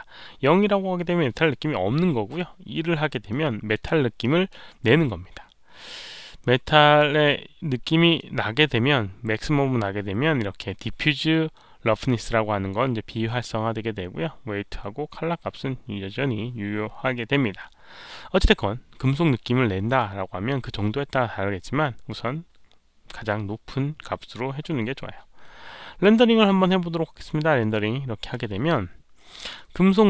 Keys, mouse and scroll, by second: 3.2-3.7 drag, 4.1 click, 6.9-8.1 drag, 14.1 click, 18.3-19.9 drag, 27.5 click.